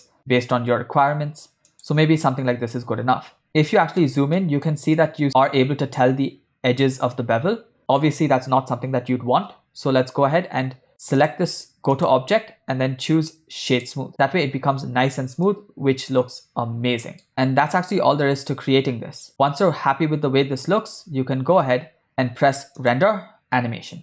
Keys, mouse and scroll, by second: 3.5-4.1 ctrl+middle drag, 4.5-4.9 shift+middle drag, 11.4 click, 12.0-14.1 drag, 15.8-17.5 ctrl+middle drag, 18.7 space, 21.7 space, 22.9-24.0 drag.